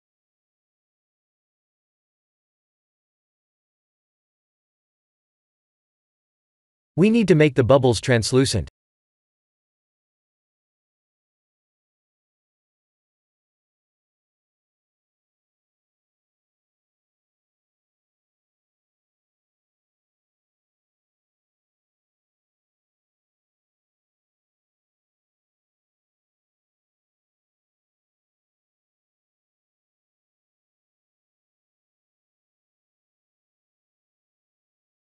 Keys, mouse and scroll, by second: 1.0 shift+click, 3.1 click, 6.0 click, 7.5 click, 7.8 middle click, 8.7-9.0 scroll up 3, 9.1 shift+middle click, 10.0 click, 13.9 click, 15.6 click, 23.4 click, 24.6 click, 25.1 click, 25.6 shift+d, 30.5-31.0 scroll down 4, 31.2 shift+middle click, 33.0 middle click.